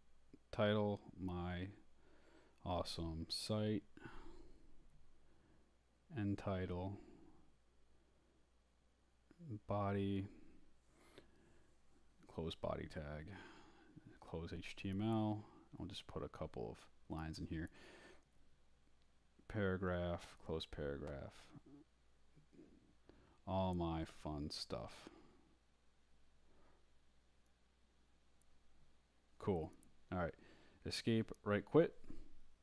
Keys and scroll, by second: 0.0-5.8 typing, 5.9 shift+Return, 7.6-14.8 typing, 10.0 shift+Return, 12.4 shift+Return, 14.8 shift+Up, 15.5 Down, 16.0 Return, 16.4 Up, 16.8-20.2 typing, 20.7 shift+Left, 21.6-28.4 typing, 28.4 shift+Right, 29.6 Escape, 30.2-31.2 typing.